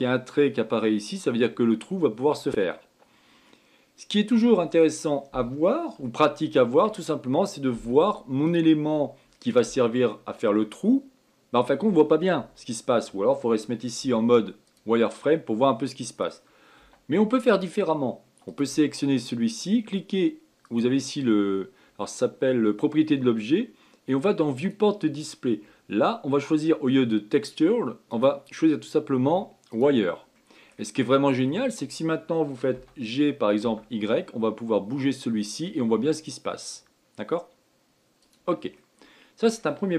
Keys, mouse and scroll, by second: 2.8-4.2 scroll down 6, 4.2-9.2 middle drag, 9.2 click, 14.7 z, 15.9-17.5 middle drag, 17.5 z, 19.2 click, 21.4 click, 25.3 click, 25.9-27.1 scroll down 5, 28.8-31.1 drag, 31.1-33.4 middle drag, 33.4 g, 39.5-39.9 middle drag.